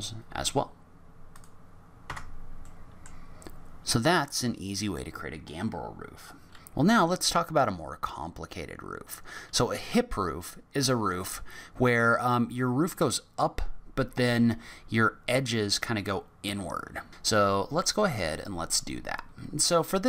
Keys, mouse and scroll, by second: 1.3 click, 2.1 Tab, 2.6 middle click, 3.2 scroll down 3, 17.4-17.8 scroll down 3, 17.8 middle click, 18.7-19.1 scroll up 1, 19.1-19.9 scroll down 2.